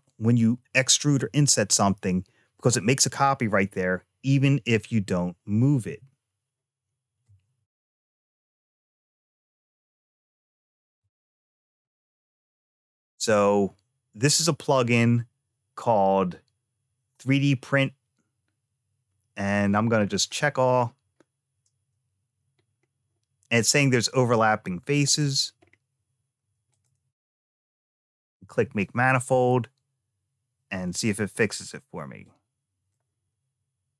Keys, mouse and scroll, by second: 5.7 a, 7.6 n, 10.8 click, 20.0 click, 22.4-22.9 scroll down 2, 24.8 click, 25.4 scroll down 2, 26.5 click, 32.0 click.